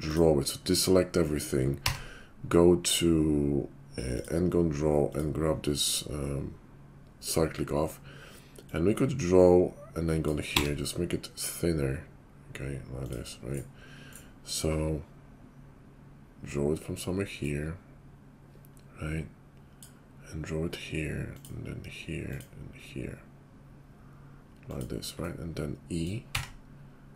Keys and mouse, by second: 0.1 click, 0.2 middle click, 1.7 d, 5.0-8.8 middle drag, 8.8-27.1 drag.